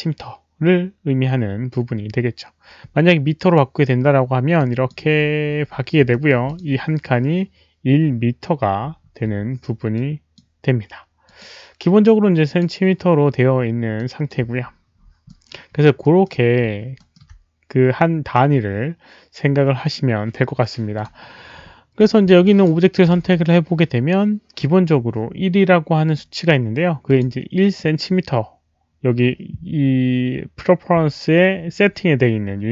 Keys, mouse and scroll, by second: 3.4 click, 4.5 click, 5.1-5.7 scroll down 1, 6.1 alt+middle click, 6.4 alt+click, 8.7 alt+click, 8.7 alt+middle click, 9.9-10.3 alt+drag, 10.1 alt+middle click, 11.2 alt+click, 12.4 alt+click, 12.4 alt+middle click, 13.9 alt+click, 14.6 alt+middle click, 15.7-16.0 alt+scroll up 1, 16.0 alt+middle click, 16.5-16.8 alt+scroll up 1, 16.9 alt+middle click, 19.4 alt+middle click, 19.4 click, 20.9 click, 21.2 alt+middle click, 21.9 click, 22.5 alt+click, 22.9 alt+right click, 23.2 w, 26.0 click, 26.1 alt+right click, 26.1 alt+middle click, 26.1 w, 27.0 alt+click, 27.6 alt+click, 31.7 alt+click, 31.7 alt+right click, 31.7 w.